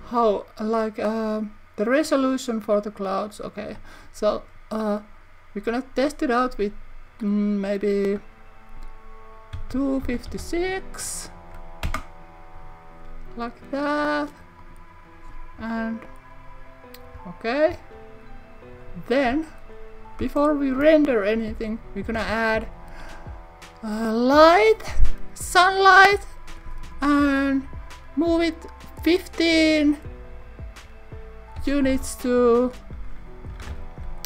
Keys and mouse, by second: 14.6 click, 17.2 KP_1, 17.7 KP_3, 20.8 shift+middle click, 22.2 shift+a, 31.9 y, 33.5 1, 33.6 5.